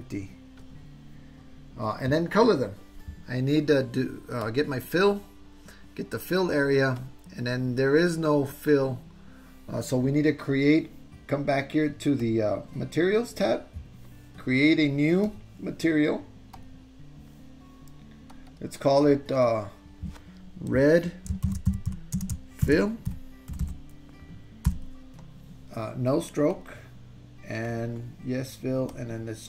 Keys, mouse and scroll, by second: 0.7 click, 4.5 click, 7.1-8.8 drag, 12.2 click, 15.4 click, 16.8 click, 18.4-25.9 drag, 23.6 l, 26.5 click, 27.7 click.